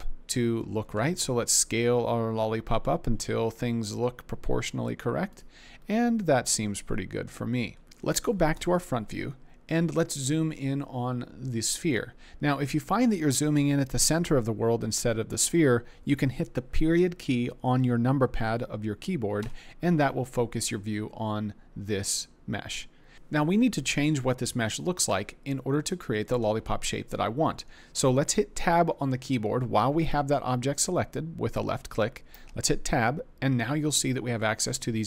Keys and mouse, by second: 0.9 s, 8.5 KP_1, 19.4 KP_Decimal, 32.4 Tab, 33.8 click, 34.4 click.